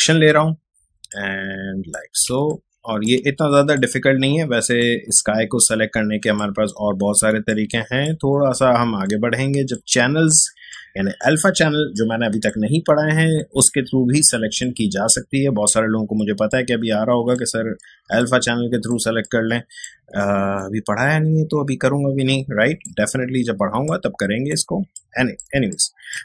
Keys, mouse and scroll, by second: 1.1 alt+click, 2.1 alt+space, 2.5-7.5 ctrl+alt+drag, 7.5 click, 7.9 space, 9.0 alt+click, 10.5 alt+space, 10.7 alt+click, 11.1 alt+space, 11.9 alt+click, 12.1 alt+space, 13.3 alt+click, 13.5-16.5 alt+drag, 16.5-17.8 alt+drag, 17.8 space, 18.1 click, 18.3 space, 19.2 click, 19.3 space, 20.5-23.9 alt+drag, 24.8 space, 24.9 click, 25.3 space, 25.7-26.2 ctrl+drag.